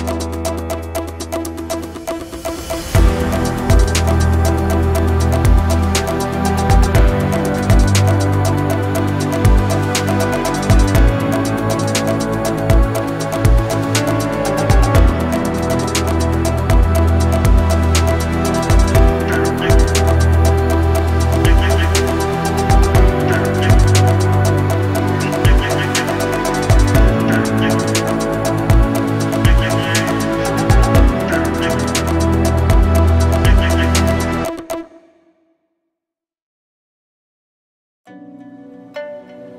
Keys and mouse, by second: 0.0 shift+click, 2.4 f, 2.5 a, 3.6 f, 3.8 f, 5.3 f, 5.4 a, 5.7 shift+click, 6.7-8.5 typing, 7.2 shift+click, 8.1 shift+click, 10.0 1, 12.4 f, 12.5 a, 15.3 f, 15.5 a, 17.4 shift+click, 17.6 Tab, 18.0 ctrl+s, 18.2-19.5 drag, 19.9 KP_7, 21.0 Tab, 21.4 shift+drag, 22.4 z, 22.7 a, 23.2 a, 23.7 shift+click, 23.9 b, 28.4 ctrl+KP_1, 29.4 shift+drag, 30.4 shift+drag, 31.5 b, 38.3 x.